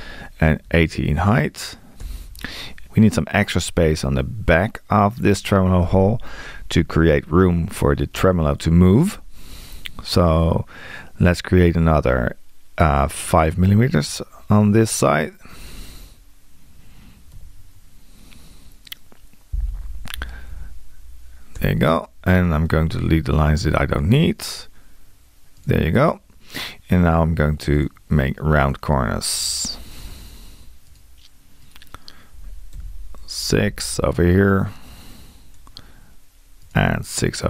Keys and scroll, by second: 13.5 r, 17.3 5, 19.7 Tab, 32.7 6.